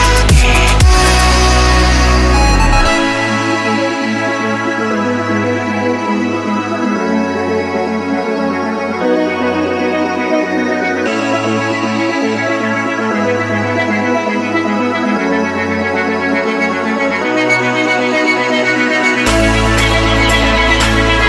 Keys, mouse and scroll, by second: 1.3 click, 5.4 Delete, 5.8 right click, 6.5 click, 9.4 Delete, 9.6 click, 9.7 F10, 10.2 click, 11.2 Delete, 11.2 click, 11.8 right click, 12.4 click, 12.5 F10, 13.8 click, 15.4 1, 19.2 F10, 19.7-21.2 drag.